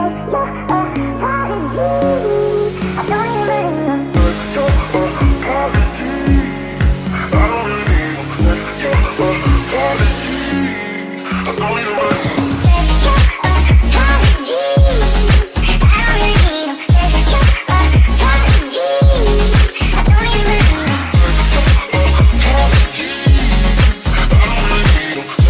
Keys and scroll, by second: 0.0-0.3 typing, 2.3 s, 4.3 ctrl+z, 5.2-10.3 typing, 11.9 w, 14.0-16.9 typing, 19.1 d, 20.1 s, 23.0-25.4 typing.